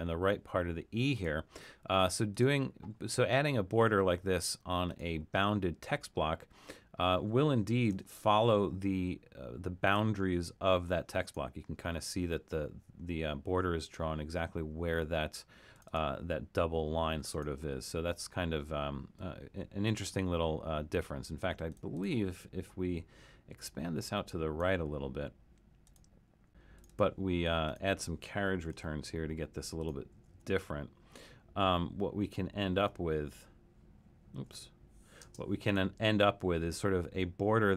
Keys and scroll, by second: 7.5-8.7 typing, 28.6 BackSpace, 28.7 Return, 30.1 BackSpace, 30.3 Return, 32.8 BackSpace, 33.3 Return, 34.5 BackSpace, 35.3 space.